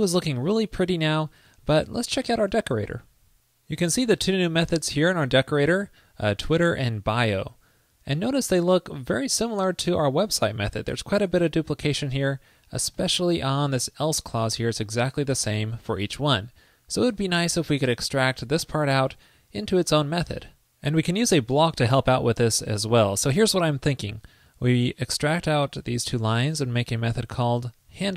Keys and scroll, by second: 25.4 super+x.